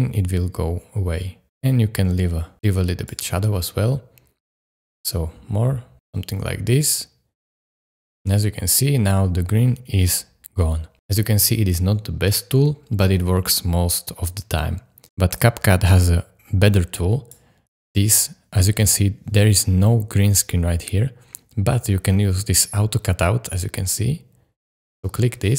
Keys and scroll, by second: 8.3 space.